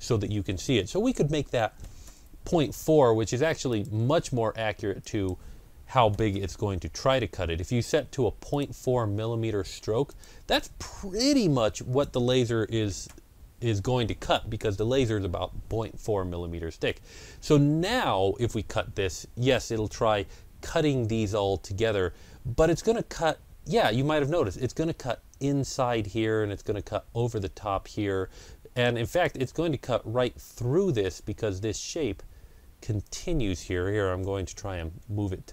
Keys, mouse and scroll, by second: 1.4 KP_Decimal, 1.7 KP_4, 1.9 KP_Enter, 3.5 click, 4.9 click, 5.8 KP_Decimal, 6.0 KP_4, 6.2 KP_Enter, 8.4 click, 10.0 click, 11.6 click, 12.8 KP_4, 13.0 KP_Enter, 16.7-17.8 scroll down 1, 28.9 click, 28.9-31.2 scroll down 1, 32.9 click, 32.9-33.8 scroll down 1, 34.9 ctrl+].